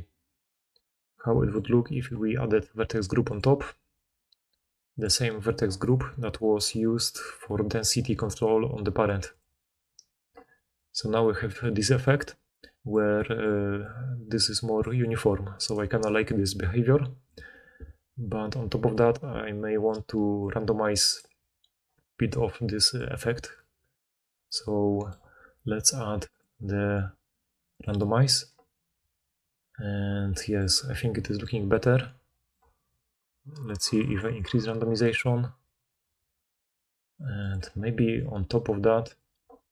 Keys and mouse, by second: 1.2-1.8 middle drag, 10.0-13.0 middle drag, 13.5 d, 14.8-16.0 typing, 20.1-21.3 d, 21.8 d, 21.9 d, 22.0-22.7 middle drag.